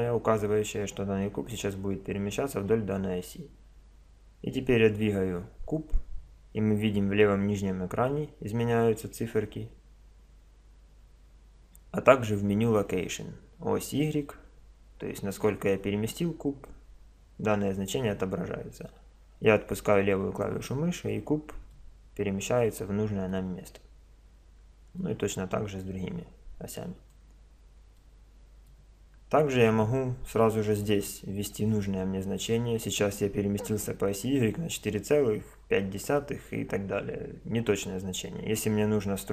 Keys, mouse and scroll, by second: 21.7-25.0 middle drag, 25.0-26.8 drag, 28.0-39.3 middle drag.